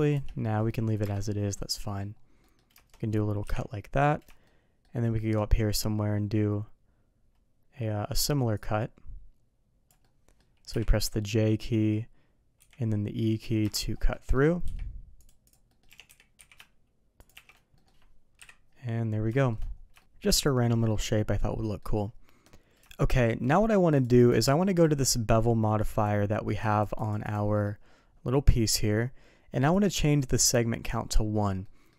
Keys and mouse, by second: 1.5-1.9 middle drag, 2.3 middle click, 3.4 KP_3, 4.4-4.8 shift+middle drag, 5.0 shift+middle click, 8.5-13.7 drag, 10.0-13.7 middle drag, 14.1 middle click, 15.6 middle click, 15.8 g, 17.3 shift+2, 17.7 middle drag, 18.3 KP_3, 19.3 shift+middle drag, 19.9 shift+middle click, 20.3-21.7 middle drag, 22.8 shift+middle drag, 23.4 middle click, 24.3 shift+middle drag, 25.9 click, 26.7 click, 26.9 click, 27.2 click, 27.5 middle click, 29.5 click, 31.6 middle drag.